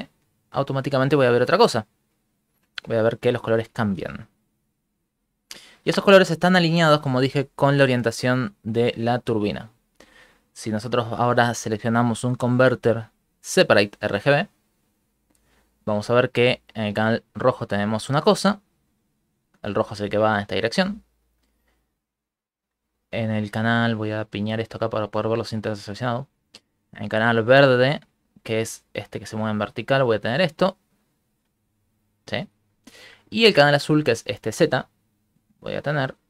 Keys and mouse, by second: 1.3 middle click, 2.3 ctrl+middle click, 2.5 middle click, 3.5 middle click, 3.7 ctrl+middle click, 3.9 Right, 4.3 Right, 5.8 Right, 6.0 Right, 6.2 Right, 6.4 Right, 6.6 Right, 6.8 Right, 9.1 Right, 9.3 Right, 10.2 middle click, 10.5 shift+a, 16.0 middle click, 19.1 right click, 20.7 middle click, 21.0 ctrl+middle click, 21.2 middle click, 23.1 right click, 24.4 click, 25.2 right click, 26.0 shift+middle click, 27.1 click, 29.8 click, 31.1 middle click, 35.7 click.